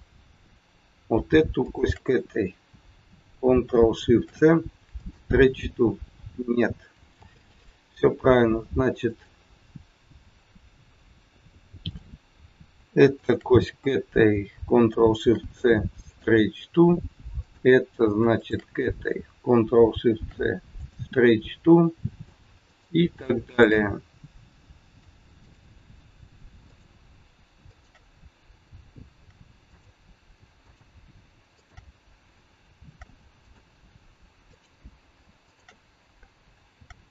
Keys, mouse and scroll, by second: 1.6 shift+click, 1.7 shift+click, 4.1 ctrl+shift+c, 7.1 ctrl+z, 9.0 click, 11.8 click, 13.1 shift+click, 13.2 shift+click, 15.1 ctrl+shift+c, 17.4 click, 18.2 shift+click, 20.1 ctrl+shift+c, 21.5 scroll down 1, 21.8 middle click, 22.6 click, 23.5 shift+click, 24.9 ctrl+shift+c, 26.6 click, 27.6 shift+click, 29.1 ctrl+shift+c, 30.5 click, 31.5 shift+click, 32.7 ctrl+shift+c, 34.5 click, 35.4 shift+click.